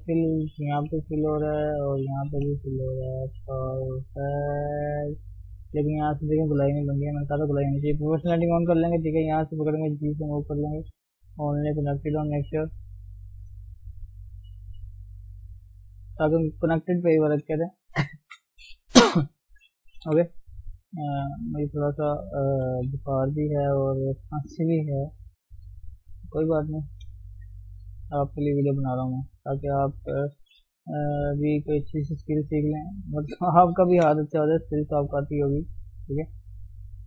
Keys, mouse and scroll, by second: 0.4 shift+click, 0.9 f, 1.4 click, 2.5 f, 2.9 Tab, 3.1 scroll down 1, 3.3 middle click, 4.2 Tab, 4.5 shift+middle click, 4.7 scroll up 1, 4.9 middle click, 5.7-6.7 scroll up 1, 6.7-8.4 shift+middle drag, 8.4 o, 9.3 click, 10.0 g, 12.8 click, 13.0 g, 14.7 click, 15.0 g, 15.7 scroll down 1, 15.9-17.4 middle drag, 17.4 KP_3, 17.5-18.1 scroll up 2, 18.1-19.5 shift+middle drag, 19.5 click, 20.2 g, 20.9 click, 21.2 click, 21.4 g, 22.6 g, 23.5 click, 23.8 g, 25.5 click, 25.7-26.3 scroll down 1, 26.3 Tab, 26.5-26.9 scroll down 2, 26.9 shift+middle click, 27.1-28.0 scroll up 3, 27.4 Tab, 28.0 shift+middle click, 28.7 click, 30.0 shift+click, 30.7 g, 32.9 click, 33.8 shift+middle click, 34.3 g, 35.2 click, 35.5 g, 36.7 click.